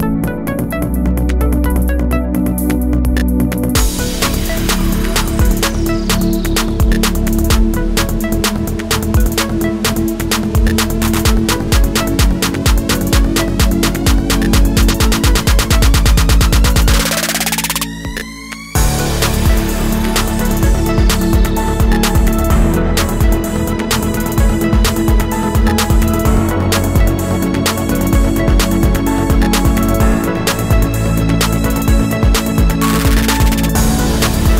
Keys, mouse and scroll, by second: 4.5-4.8 alt+scroll down 1, 4.8 space, 5.7-6.0 alt+scroll down 1, 7.3-7.6 alt+scroll up 1, 8.9 alt+scroll up 1, 11.0 alt+scroll up 1, 11.2 space, 25.6 alt+scroll down 1, 25.9 space, 26.7 alt+scroll up 1.